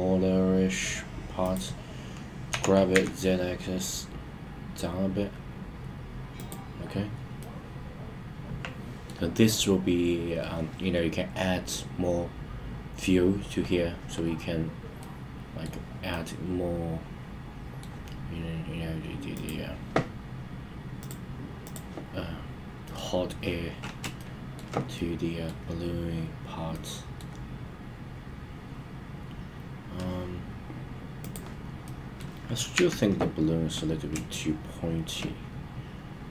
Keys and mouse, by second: 1.4 click, 2.4 g, 2.9 z, 6.3 click, 7.4-9.1 middle drag, 15.0-15.6 middle drag, 16.0-17.8 middle drag, 21.0-21.7 drag, 22.8 middle click, 24.1-24.5 shift+middle drag, 24.9-25.4 middle drag, 26.7-27.1 middle drag, 31.1 click, 31.8-32.2 middle drag, 32.7 KP_1, 34.2-35.0 shift+middle drag.